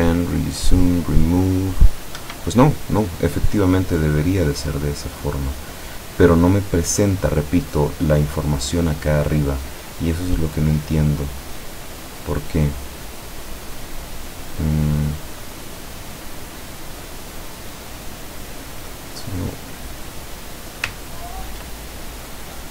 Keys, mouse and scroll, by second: 2.2 Escape, 3.6-5.8 middle drag, 5.8-6.4 scroll up 2, 6.4-7.4 middle drag, 7.4-8.4 scroll up 2, 8.4-10.0 scroll up 1, 14.9-17.3 middle drag, 21.0-21.8 ctrl+drag.